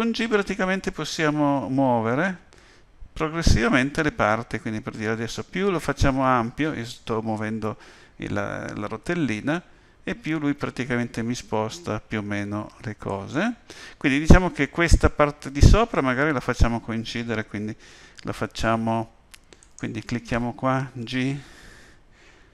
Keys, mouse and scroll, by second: 19.6 click, 21.0 g.